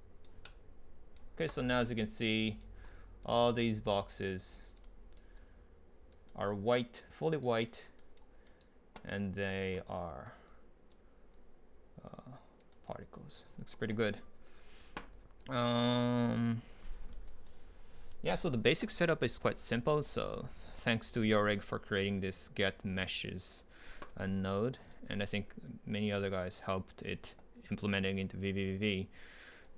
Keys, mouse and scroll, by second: 3.3 drag, 3.6 right click, 5.1-5.4 right drag, 5.4 drag, 7.6-8.0 drag, 8.5 right click, 8.9-10.7 drag, 12.5 drag, 12.7-15.1 right drag, 15.1-17.3 drag, 17.3-19.3 right drag, 19.6-20.9 right drag, 20.9-21.7 drag, 26.3-28.1 drag, 28.1-28.9 scroll up 2, 28.9-29.6 drag, 29.6 right click.